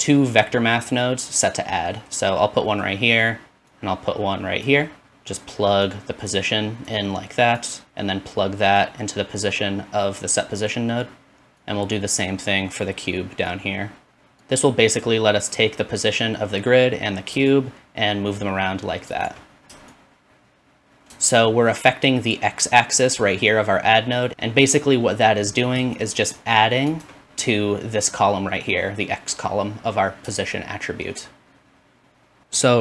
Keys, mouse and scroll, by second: 19.2 shift+middle click, 20.0 shift+click, 21.0 shift+middle click, 21.3-27.0 shift+drag, 27.0-29.8 shift+middle drag, 30.5-32.4 shift+drag, 32.4 middle click.